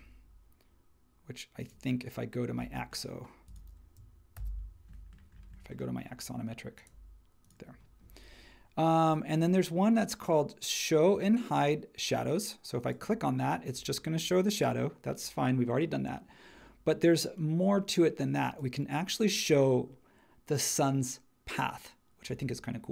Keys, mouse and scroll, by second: 4.3 super+e.